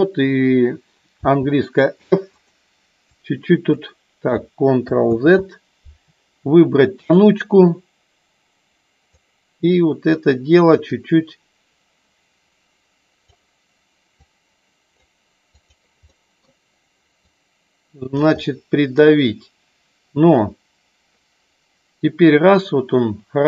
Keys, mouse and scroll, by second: 1.2 f, 3.0 click, 5.0 ctrl+z, 7.0 click, 9.2 click, 10.8-13.2 drag, 14.2 click, 15.5 click, 16.0 middle click, 17.3 click, 18.4 middle click, 20.5-23.4 drag.